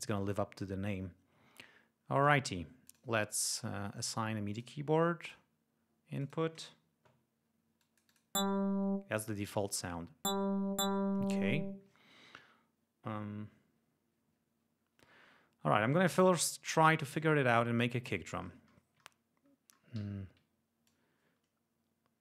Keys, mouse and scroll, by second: 0.0 click, 0.1 click, 2.1 click, 2.7 click, 4.4 click, 5.1 click, 6.1 click, 7.7 click, 16.6 click, 17.9-18.4 ctrl+scroll up 4, 18.7-19.2 ctrl+scroll up 4, 19.9 d, 20.8-22.2 drag.